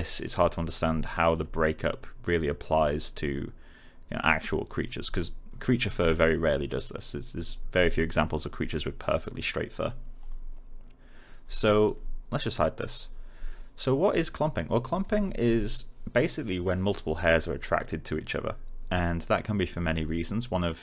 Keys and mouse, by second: 5.1 alt+click, 11.4 alt+click, 13.4 alt+middle click, 14.1 alt+click.